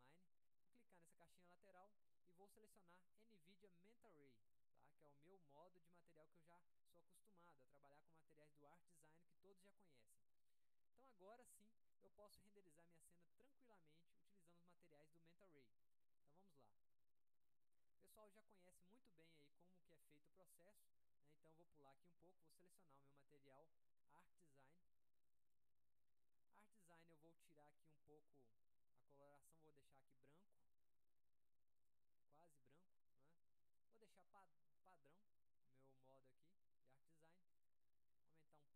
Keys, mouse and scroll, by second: 1.2 click, 4.3 click, 11.5 click, 15.9 middle click, 16.1-16.5 scroll down 1, 18.5-19.6 drag, 20.3 click, 21.6 drag, 22.9 click, 23.6-24.7 scroll down 1, 25.3 click, 27.1 click, 28.1 click, 29.4 click, 31.8 click, 32.5 middle click, 32.9 scroll up 1, 33.4 middle click, 36.0 middle click, 38.5 right click.